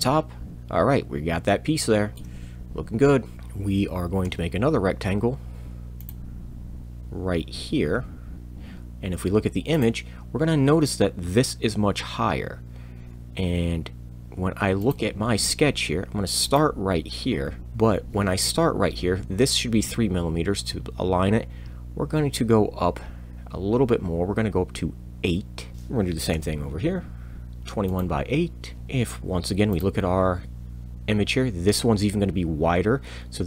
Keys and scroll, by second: 4.2 r, 25.7 Tab, 25.7 8, 25.7 r, 26.3 r, 28.7 r.